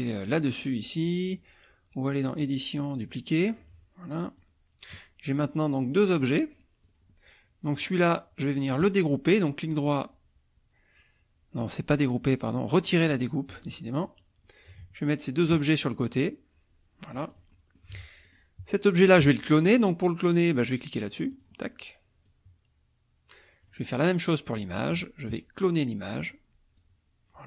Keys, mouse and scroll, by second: 2.3 click, 3.5 click, 4.4 click, 5.8-7.1 drag, 7.8 click, 8.8 right click, 13.2 click, 13.6 click, 14.2-15.6 drag, 16.2-17.9 drag, 18.3 click, 21.4 click, 22.2-23.8 drag, 24.1 click, 24.5 middle click, 26.2 click, 26.8-27.4 drag.